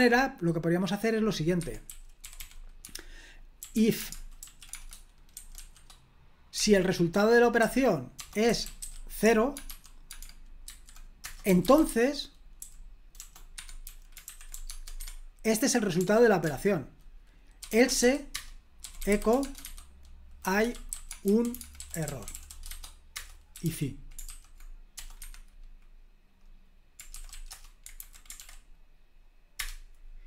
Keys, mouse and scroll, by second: 0.0 o, 1.6 Escape, 1.6-6.6 typing, 7.6-12.4 typing, 13.5 Escape, 13.6-16.0 typing, 17.4-25.5 typing, 26.9-27.8 typing, 28.0 super+h, 28.4 ctrl+p, 29.6 Return.